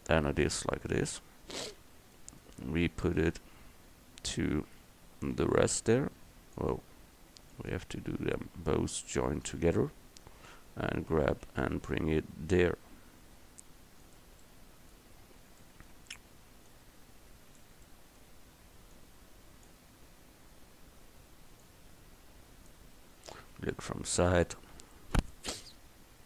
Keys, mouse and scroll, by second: 5.4 g, 9.5-11.0 drag, 11.0 g, 14.9-15.3 middle drag, 17.9-20.0 middle drag, 20.0-23.8 drag, 23.9 KP_3.